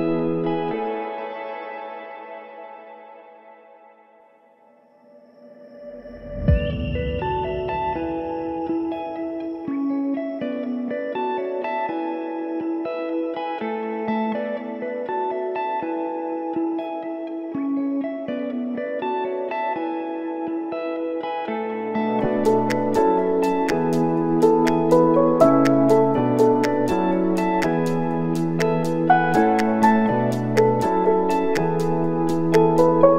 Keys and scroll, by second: 2.7 4, 3.0 Return, 5.3-6.3 typing, 6.8 Return, 12.6 5, 12.9 3, 13.1 Return, 15.4-16.3 typing, 22.8 KP_Subtract, 22.9-23.7 typing, 26.3-27.2 typing, 29.9-30.8 typing, 31.4 ctrl+s.